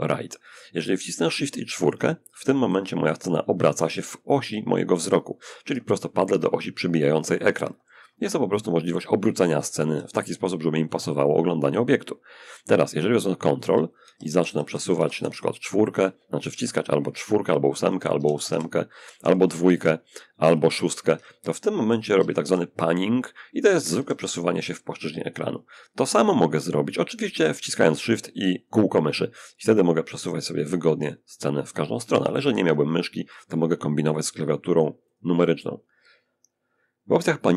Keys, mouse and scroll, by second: 1.1 shift+4, 1.6 shift+4, 2.0 shift+4, 4.8 6, 4.9 6, 5.2 6, 8.5 4, 8.7 4, 8.9 4, 12.8 ctrl+4, 13.3 ctrl+4, 13.5 ctrl+4, 14.9 ctrl+6, 15.0 ctrl+6, 15.2 ctrl+6, 17.2-18.4 typing, 19.4-22.1 typing, 23.2 8, 23.4 8, 28.0-33.3 shift+drag, 34.4 click.